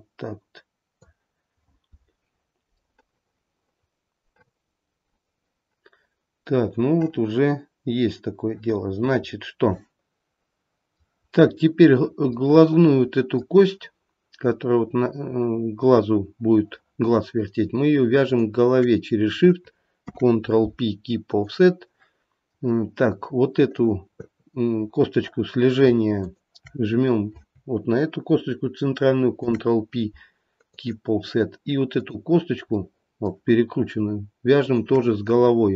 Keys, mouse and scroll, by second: 2.9 middle click, 3.4 middle click, 9.3-9.9 scroll up 1, 9.9 middle click, 10.9 middle click, 11.3-12.5 scroll up 1, 12.5 middle click, 12.7 middle click, 18.2 shift+click, 20.0 ctrl+p, 22.7 middle click, 23.8 click, 26.3 shift+click, 31.9 click, 32.8 middle click, 34.6 shift+click.